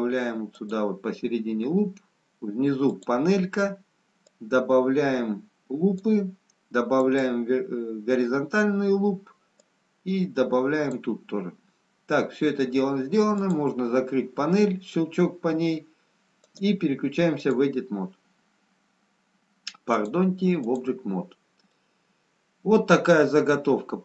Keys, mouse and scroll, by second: 0.6 click, 3.2 click, 4.4 click, 7.0 click, 9.7 click, 13.6 click, 20.1 click, 21.6 middle click.